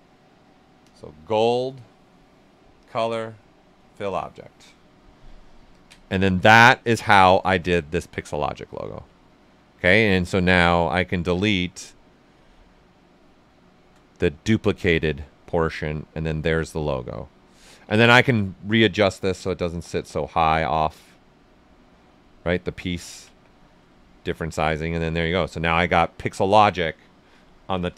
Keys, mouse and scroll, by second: 5.7 ctrl+click, 7.2 ctrl+shift+a, 7.6-9.2 shift+right drag, 9.2-10.5 alt+right drag, 10.5-13.4 drag, 15.2 right click, 17.5 ctrl+w, 17.9 ctrl+right click, 18.8-20.5 drag, 20.5-22.9 drag, 22.9 ctrl+right click, 23.2 q, 23.5 right click, 24.0 alt+right click, 24.3 alt+right click, 25.3 alt+right click, 25.7 right click, 26.6 right click.